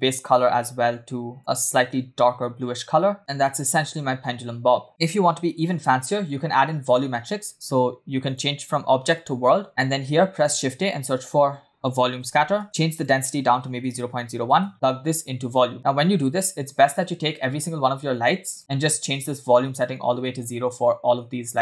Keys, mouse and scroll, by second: 0.2 click, 7.1 space, 8.2-9.3 drag, 9.7 middle click, 9.7 scroll down 3, 10.1 shift+a, 12.9-14.5 drag, 14.7-15.7 drag, 15.7 space, 18.4 space, 18.5 click, 19.1 click, 21.4 click.